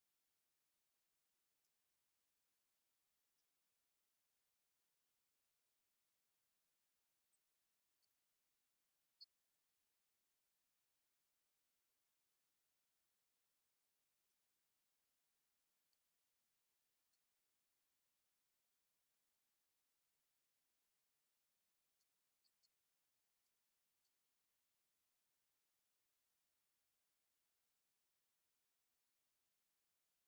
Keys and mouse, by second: 4.0-5.1 drag, 5.8-14.0 drag, 15.2-18.7 drag, 19.1 right click, 20.1 s, 27.9-29.4 drag.